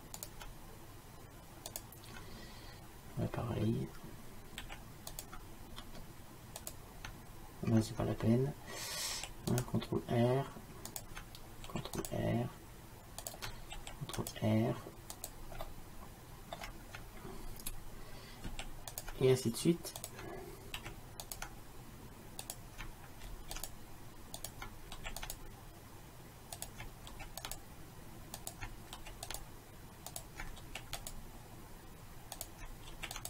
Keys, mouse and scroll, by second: 4.7 ctrl+r, 9.2 ctrl+r, 11.7 ctrl+r, 13.8 ctrl+r, 15.7 middle click, 18.5 ctrl+r, 20.8 ctrl+r, 23.4 ctrl+r, 25.0 ctrl+r, 27.2 ctrl+r, 29.0 ctrl+r, 30.6 ctrl+r, 33.0 ctrl+r.